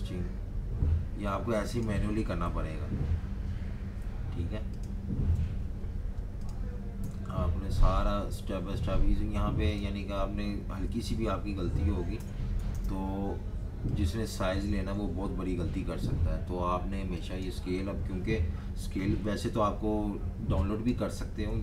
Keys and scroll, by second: 2.4 7, 5.3 8, 7.0 9, 12.1-13.2 typing, 14.7 typing, 19.2 typing, 21.4 typing.